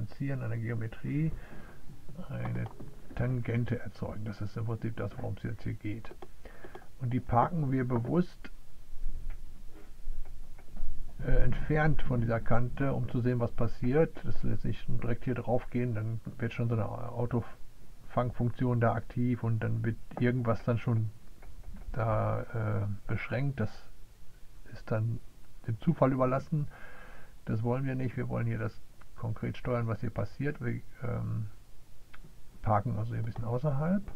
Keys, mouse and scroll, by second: 0.0 click, 1.9 click, 2.5-6.3 drag, 6.6-32.4 right drag, 32.4 drag, 32.5 right click.